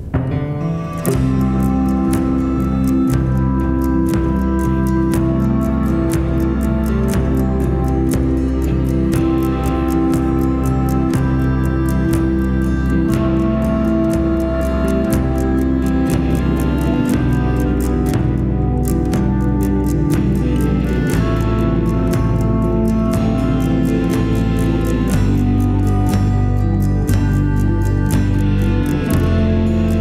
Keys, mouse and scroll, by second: 1.4 shift+middle click, 6.6 shift+middle click, 9.9 shift+middle click, 16.6 scroll down 1, 17.2 scroll up 1, 18.4 shift+middle click, 20.4 scroll down 1, 21.8 alt+click, 23.7 scroll up 1, 24.4 shift+middle click, 25.6-25.9 shift+scroll up 1, 25.9 shift+right click.